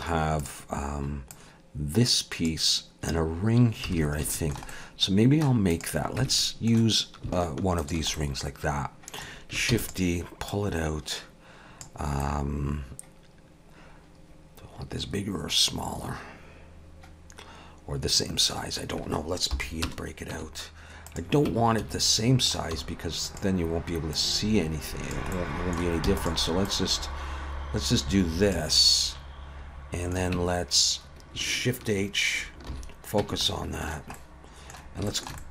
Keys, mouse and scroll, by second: 0.4 click, 1.3 click, 3.6 scroll up 2, 3.9 alt+a, 4.3 shift+middle click, 4.7 middle click, 5.7 click, 6.2 Tab, 6.4 middle click, 8.0 alt+shift+click, 8.1 middle click, 9.7 shift+d, 10.5 click, 12.2 middle click, 19.5 p, 20.3 Tab, 21.1 click, 21.5 Tab, 21.8 a, 22.1 middle click, 22.7 s, 24.1 click, 25.3 middle click, 26.1 e, 26.7 click, 28.8 middle click, 30.4 Tab, 32.7 shift+h, 33.2 Tab, 34.2 middle click, 35.1 shift+middle click, 35.4 middle click.